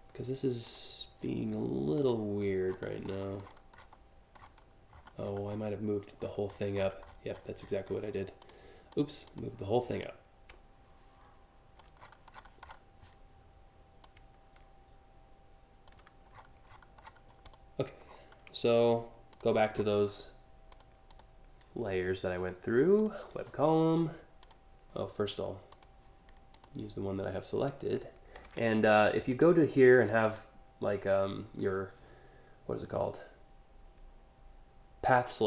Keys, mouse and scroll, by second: 0.3 click, 1.6 click, 2.3-3.5 scroll down 10, 4.0-4.4 scroll down 3, 4.6-5.3 scroll up 6, 5.8-7.6 scroll up 10, 8.0 click, 8.5 click, 8.9 click, 9.6-11.4 drag, 11.6-12.4 scroll down 7, 13.7-15.5 shift+drag, 16.0 scroll down 4, 16.3 scroll, 16.7 scroll, 17.1 click, 17.7 alt+scroll, 17.8 alt+scroll, 19.0 click, 20.4 click, 20.7 click, 22.6 click, 24.0 click, 25.3 click, 26.2 click, 28.0 a, 28.9 ctrl+click, 29.9 click.